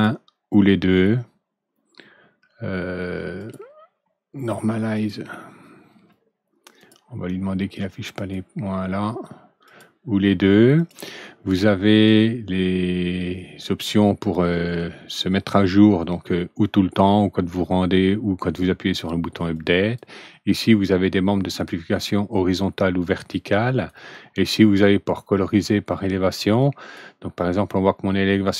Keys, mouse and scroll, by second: 3.3 click, 4.9 click, 6.7 click, 8.1 click, 9.6 click, 10.7 click, 11.5-12.0 drag, 19.5-19.9 drag, 22.9-23.8 drag, 26.5 click.